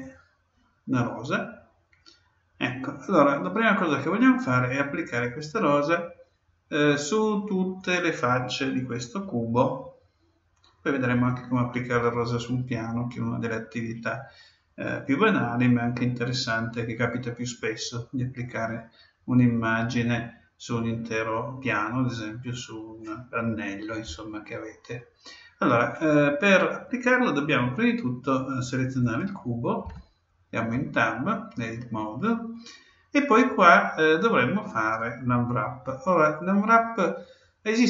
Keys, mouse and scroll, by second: 0.0-1.9 drag, 0.9-9.3 middle drag, 29.0-30.9 right drag, 29.8 Tab.